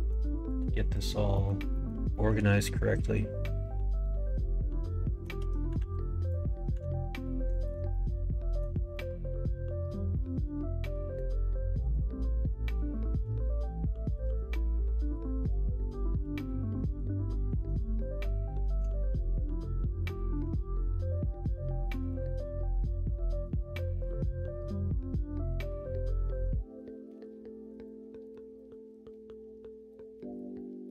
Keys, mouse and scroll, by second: 0.2 shift+middle click, 0.7 middle click, 1.3 middle click, 1.7 middle click, 2.0 shift+middle click, 2.5-5.2 middle drag, 5.7 ctrl+r, 6.7 ctrl+r, 7.8 middle click, 8.9 middle click, 10.1-11.2 middle drag, 12.6 shift+click, 13.1 middle click, 14.2 f, 14.6 middle click, 15.7 click, 16.9 click, 17.4 click, 18.3 middle click, 18.9-20.3 middle drag, 20.5 ctrl+r, 22.4 middle click, 24.4-25.4 middle drag, 26.2 shift+click, 27.1 ctrl+e, 28.5 middle click, 29.9 alt+click, 30.5 middle click.